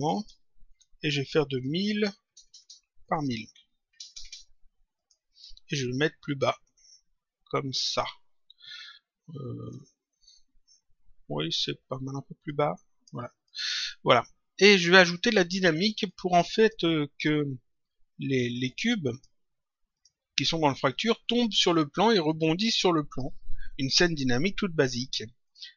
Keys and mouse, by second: 3.0 click, 4.9 click, 6.2 click, 9.6 click, 12.4 click, 14.7 click, 16.0 click, 18.6 click, 19.8 click, 25.4 click.